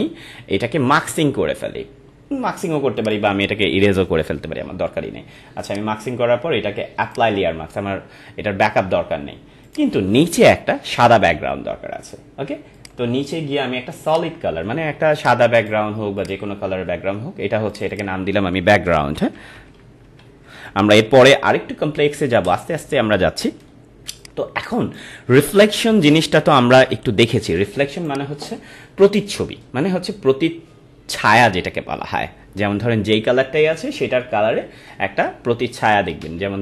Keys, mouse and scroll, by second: 3.0 click, 7.0 click, 9.6 click, 12.7 click, 18.6-21.4 typing, 22.4 Return, 24.2 click, 24.3 space, 27.3-30.5 drag, 35.2 scroll down 1, 36.3 scroll down 1.